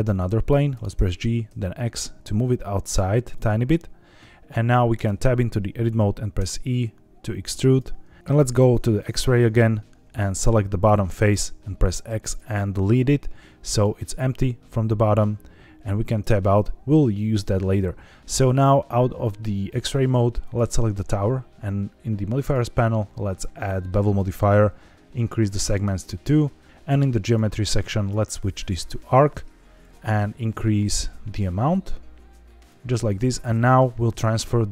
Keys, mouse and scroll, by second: 0.7 g, 0.9 y, 1.4 x, 3.3 click, 4.9 Tab, 6.3 e, 7.6 click, 7.9 z, 8.2 z, 9.8 3, 10.2 click, 11.2 x, 12.8 middle click, 14.4 middle click, 15.8-16.1 scroll down 1, 16.1 Tab, 16.5 z, 18.3-18.8 scroll up 2, 20.4 click, 24.1 click, 25.4 click, 26.6 click, 27.2 click, 27.9-28.9 drag, 29.8-32.6 shift+drag.